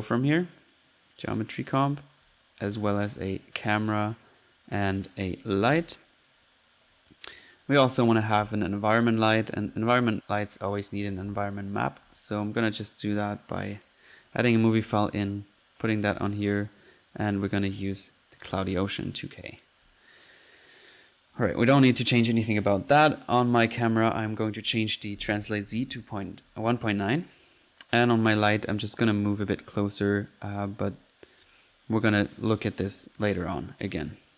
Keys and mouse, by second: 0.0-0.3 typing, 0.4-0.8 drag, 1.3 click, 2.2 click, 2.4-3.1 typing, 3.3 click, 4.0-4.3 drag, 4.4 drag, 4.8-5.2 drag, 5.3 click, 5.4-6.2 typing, 6.3 click, 6.9 drag, 7.1 click, 7.2 drag, 7.6 click, 7.9-8.6 typing, 9.1 click, 9.9 click, 10.5 click, 11.0 typing, 12.1-12.5 drag, 14.4 click, 14.9 click, 17.4 click, 19.8 click, 20.7 drag, 21.0-21.4 middle drag, 21.4 click, 21.5 click, 22.6 middle click, 22.9 drag, 24.3 click, 27.5-27.8 drag, 28.3 middle click, 28.7 click, 29.1 click, 29.7 click, 30.2 right click, 30.7 right click, 31.0 click, 32.5 right click, 32.8-33.3 right drag, 33.4-34.3 drag.